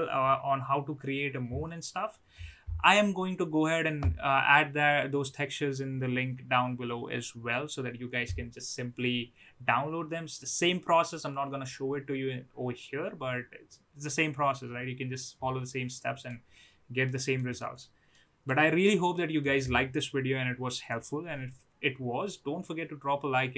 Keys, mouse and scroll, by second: 15.9 middle click, 17.0-17.8 middle drag, 18.1-18.7 middle drag, 19.1-20.2 middle drag.